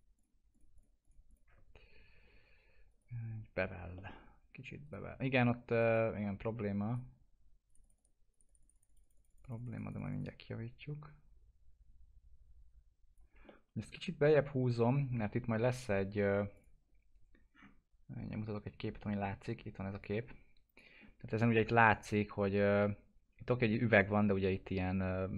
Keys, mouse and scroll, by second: 3.9 alt+middle click, 4.8 right click, 5.9-13.5 drag, 13.5-16.5 alt+middle drag, 16.5 click, 21.0 scroll down 1, 23.2 scroll up 1.